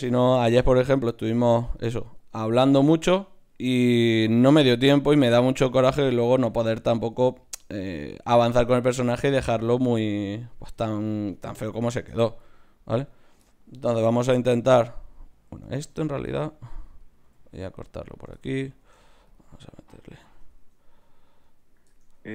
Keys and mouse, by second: 0.1 f, 1.4 ctrl+Tab, 2.1 click, 3.6 g, 4.9-7.8 typing, 9.5 g, 9.7-11.9 drag, 9.7-11.9 right drag, 10.1 g, 10.7 g, 13.6-15.8 drag, 14.0 g, 15.8 ctrl+z, 16.3 ctrl+Tab, 17.0-18.4 drag, 17.2 x, 18.8 ctrl+Tab, 19.5-21.8 drag, 20.6 Tab, 21.8 Tab.